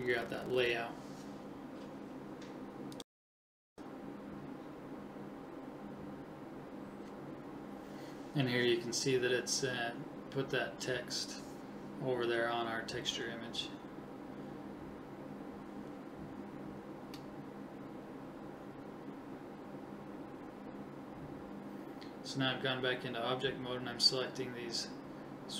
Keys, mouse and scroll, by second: 2.4-3.5 middle drag, 3.5 right click, 6.3-8.8 middle drag, 13.6 right click, 13.8-15.5 middle drag, 16.0-17.0 drag, 17.1 click, 18.9-20.2 drag, 20.2 alt+h, 20.8 right click, 22.4-25.1 right drag, 24.8 shift+h.